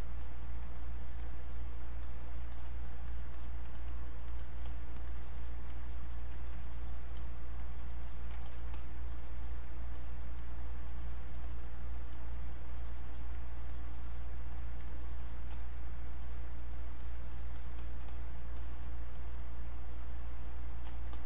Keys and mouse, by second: 0.8-4.4 alt+drag, 5.1 alt+click, 5.8-7.2 drag, 7.7-10.0 alt+drag, 10.0 alt+click, 10.6 click, 12.1 click, 12.7 alt+click, 13.6 click, 14.9 click, 16.6 click, 17.9-20.4 drag, 20.9 alt+click, 21.1-21.2 drag.